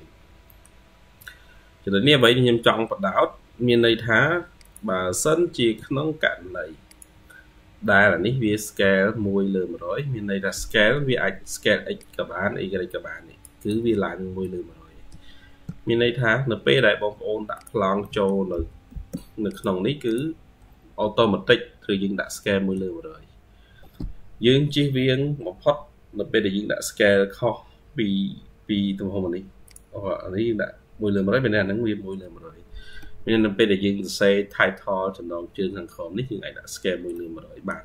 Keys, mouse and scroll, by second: 0.3 middle click, 1.6-2.6 scroll up 2, 5.6 Escape, 11.8 ctrl+q, 11.8 ctrl+click, 11.9-13.6 ctrl+q, 14.0-15.0 scroll up 1, 15.3 scroll down 2, 15.5 Escape, 17.9 middle click, 19.9 double click, 20.4-21.5 scroll up 2, 21.8-22.2 scroll down 2, 32.8 Escape, 33.7-34.8 scroll up 2, 35.5-36.5 scroll up 3, 36.6-37.0 scroll down 3, 37.0 middle click.